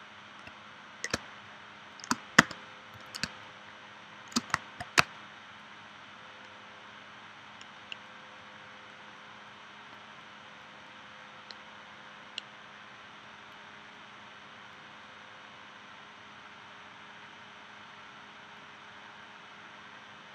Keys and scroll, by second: 1.1 space, 2.4 v, 3.2 space, 5.0 space.